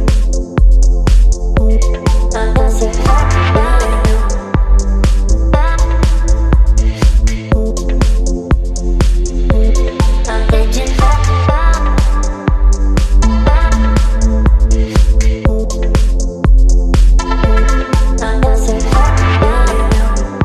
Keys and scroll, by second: 0.8 space, 18.2 Return, 19.1 space, 20.1 ctrl+m.